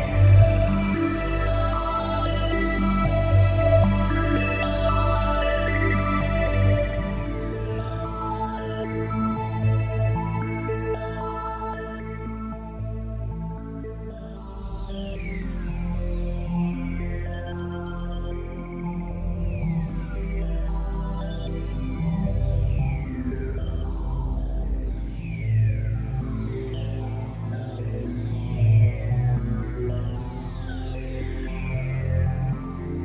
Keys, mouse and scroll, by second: 0.2 shift+right click, 1.1 middle click, 3.0 shift+right click, 3.8 middle click, 7.6 z, 9.4 s, 12.6 click, 13.8 middle click, 20.8 s, 27.7 click, 29.4 middle click, 30.8 KP_5, 32.8 KP_3, 32.8 KP_5.